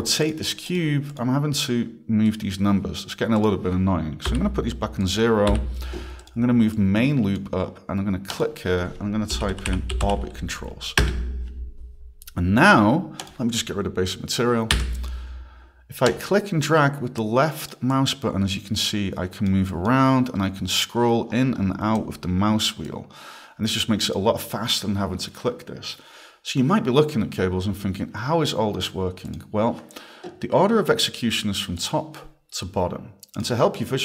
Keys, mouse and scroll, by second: 0.1 click, 0.2 click, 0.7 click, 1.1 click, 2.3 click, 4.3 click, 4.4 0, 5.0 click, 6.2 click, 6.8 click, 8.3 click, 9.1-10.5 typing, 11.0 Return, 13.2 click, 16.1 click, 17.9 click, 19.7 click, 20.2-20.6 scroll, 21.3 scroll, 22.0 click, 22.9 click, 29.3 click, 31.8 click, 33.4 click.